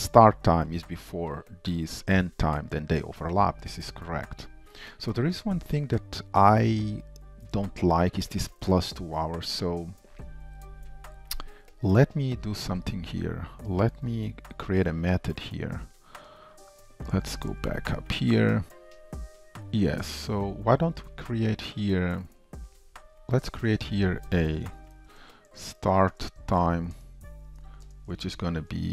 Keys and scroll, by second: 17.0 ctrl+shift+Up, 22.9 ctrl+shift+Down, 23.2 ctrl+shift+Up, 24.0 shift+Return.